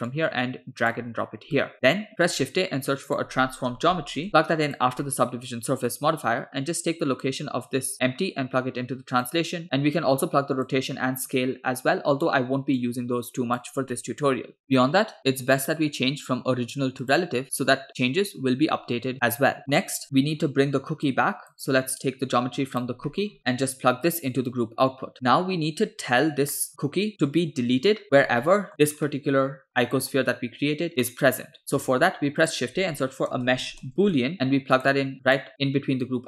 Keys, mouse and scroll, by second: 0.1 click, 1.6 click, 2.2 shift+a, 5.0 middle click, 5.9 middle click, 7.7-9.4 drag, 9.8-10.8 drag, 11.3-12.3 drag, 12.8 click, 14.0 middle click, 14.4 scroll up 4, 17.1 click, 19.6 middle click, 19.6 scroll down 4, 20.0 click, 21.2 click, 22.6 click, 23.1 middle click, 23.3 scroll up 6, 24.1-25.1 drag, 25.1 middle click, 25.3-25.7 scroll down 1, 26.1 middle click, 26.5 middle click, 26.8-27.4 scroll up 2, 28.2-28.7 scroll down 2, 28.5 middle click, 29.1 middle click, 29.9 click, 30.9-31.6 scroll down 2, 31.0 middle click, 31.9 shift+a.